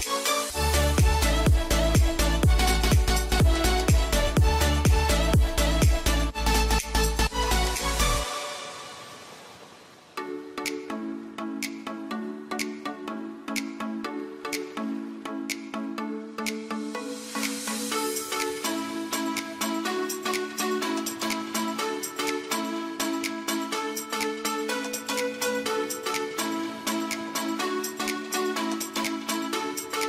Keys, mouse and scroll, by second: 28.9 right click, 29.9 click.